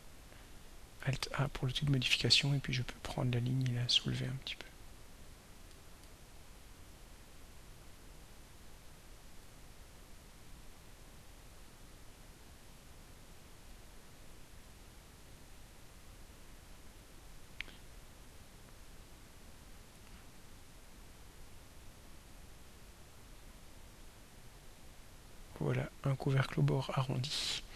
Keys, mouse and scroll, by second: 1.2 alt+a, 2.8 click, 4.7 click, 5.6 click, 7.0 click, 7.6 click, 9.3 click, 11.1 click, 11.9 click, 12.8-13.9 drag, 15.3 click, 16.5 click, 17.3 click, 18.3 click, 19.4 click, 21.4 click, 24.4 click.